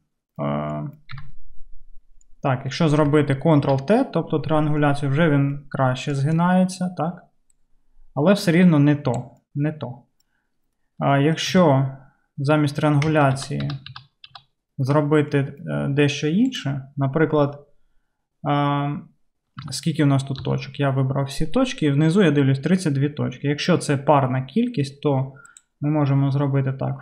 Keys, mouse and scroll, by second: 1.3 Tab, 3.6 Tab, 4.6 Tab, 11.5 Tab, 13.4 ctrl+Tab, 13.6 ctrl+z, 13.9 ctrl+z, 14.3 ctrl+z, 16.6-25.6 middle drag, 19.7 1, 20.4 a, 25.6-27.0 drag.